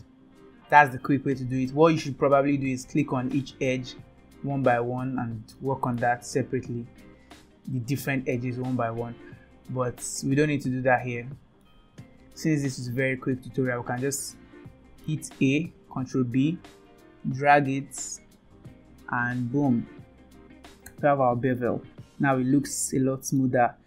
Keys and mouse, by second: 2.0 middle click, 3.7 click, 4.4 click, 4.8 click, 5.6 middle click, 6.2 Tab, 7.2 click, 7.5 Tab, 7.8 click, 9.0 click, 10.5-11.7 middle drag, 12.4 middle click, 13.1 a, 14.8 middle click, 16.0 ctrl+b, 20.9 Tab, 21.6-23.4 middle drag.